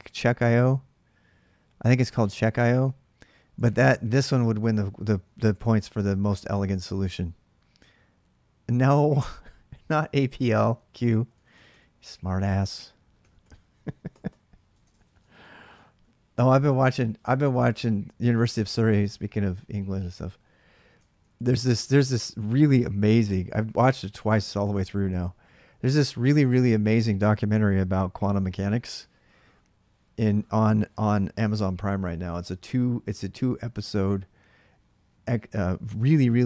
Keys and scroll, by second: 3.3-6.3 typing, 10.4 ctrl+[, 10.9 ctrl+[, 11.1 k, 11.3 k, 13.0 d, 13.2 d, 14.5-16.8 typing, 16.2 ctrl+[, 16.6 Return, 20.8 ctrl+[, 21.0 k, 21.1 k.